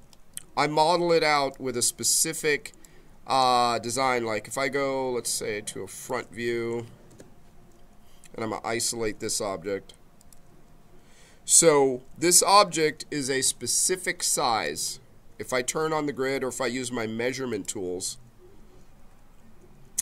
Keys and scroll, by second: 3.8 space, 7.0 f.